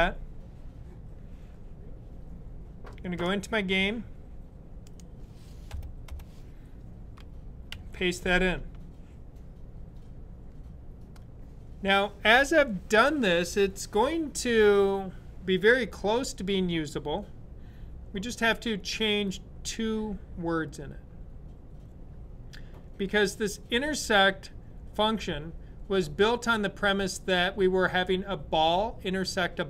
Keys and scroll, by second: 7.5 v.